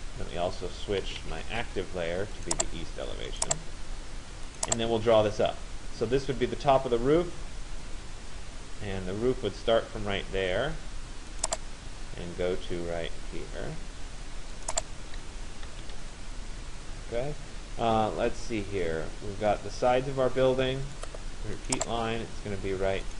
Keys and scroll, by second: 15.4 Return.